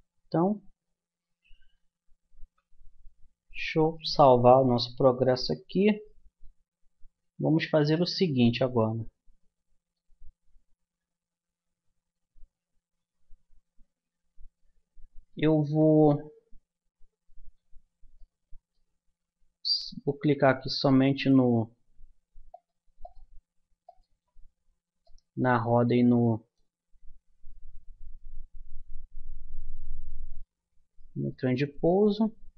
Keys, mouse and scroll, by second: 0.0 Escape, 2.4 a, 3.8-5.6 drag, 6.0-11.3 middle drag, 18.2-21.2 middle drag, 22.5-25.4 drag, 25.4-30.3 middle drag, 27.0 a, 30.4 click, 31.0-32.5 middle drag.